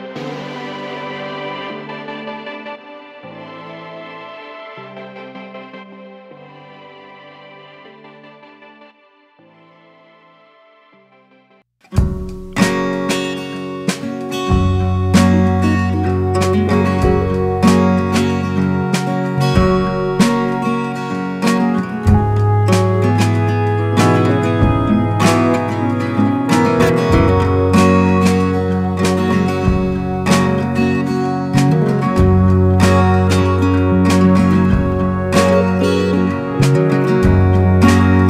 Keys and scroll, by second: 30.4 alt+space, 31.5 ctrl+alt+shift+e.